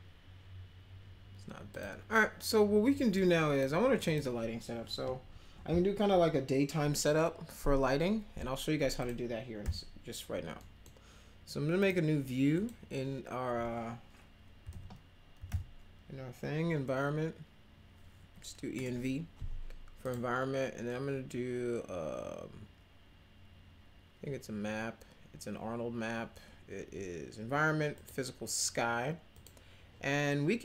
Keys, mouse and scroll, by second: 1.7 click, 3.1 click, 4.0 click, 8.9 click, 9.6 m, 10.6 middle click, 11.8 right click, 12.5 click, 15.1-15.9 typing, 18.2 BackSpace, 18.7 Return, 27.9 click, 29.3 click.